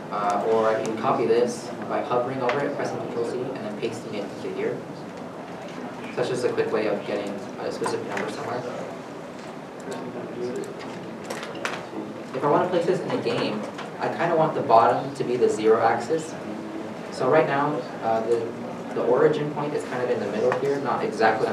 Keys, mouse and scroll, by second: 1.4 ctrl+c, 2.9 ctrl+c, 4.0 ctrl+v, 4.6 ctrl+v, 6.2 middle click, 7.9 shift+middle click, 9.2 Tab, 9.9 scroll down 1, 10.9-11.3 scroll down 1, 12.1-14.1 scroll up 1, 16.2 a, 17.6 scroll up 1, 18.5 shift+middle click, 18.7-19.1 shift+scroll down 1, 19.1-19.8 scroll up 1.